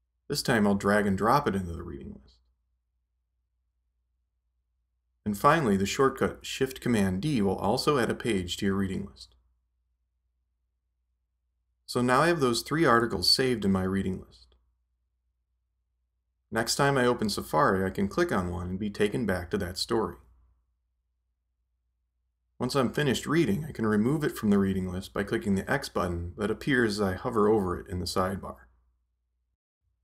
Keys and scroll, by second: 6.3 shift+super+d.